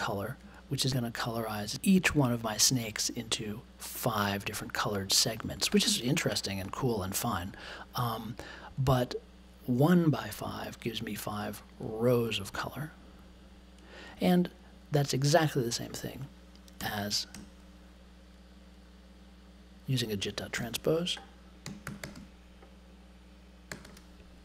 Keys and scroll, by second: 10.8 1, 11.0 space, 16.7 BackSpace, 20.5-24.3 typing.